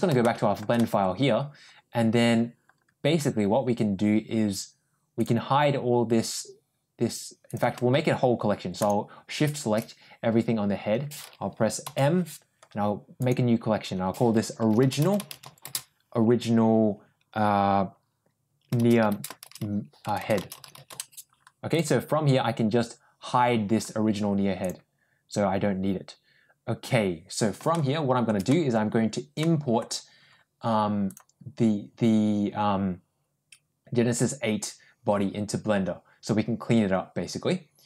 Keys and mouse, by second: 0.1 shift+middle click, 0.6 middle click, 5.0 click, 8.6 shift+click, 11.7 m, 20.1 BackSpace, 24.5 click, 27.6 shift+middle click, 28.3 middle click, 29.3 middle click, 31.0-37.8 drag.